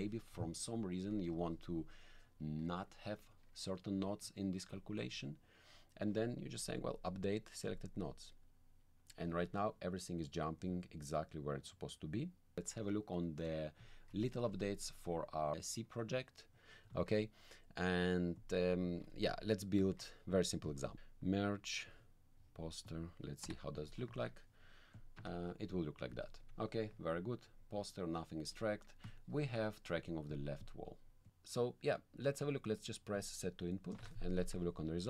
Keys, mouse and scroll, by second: 5.6 click, 7.7 click, 10.6-12.8 drag, 13.2 click, 13.9 alt+click, 17.0 alt+click, 18.3 click, 18.9 alt+click, 19.9 alt+click, 20.6 click, 20.9 m, 21.8 click, 22.8 click, 24.2 alt+click, 24.9 click, 25.2 1, 26.1 click, 27.5-28.6 drag, 29.0-30.2 drag, 30.3 click, 33.1 click, 34.3 click.